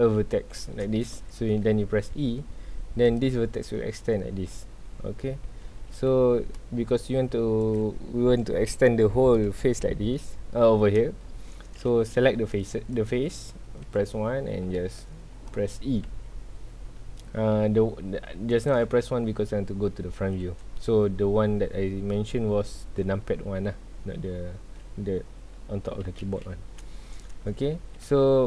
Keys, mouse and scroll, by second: 0.0 scroll up 1, 1.1 scroll down 1, 1.4 middle click, 2.1 e, 4.5-5.7 middle drag, 5.7 ctrl+z, 5.8-6.8 ctrl+middle drag, 6.8 scroll up 2, 7.1 3, 7.6 click, 9.3-11.8 middle drag, 11.8 KP_1, 12.5 middle click, 12.9 click, 13.9 KP_1, 14.6 shift+middle click, 15.1 scroll up 1, 16.0 e, 18.7 click, 20.5 scroll down 1, 27.0 scroll up 1, 27.9 g.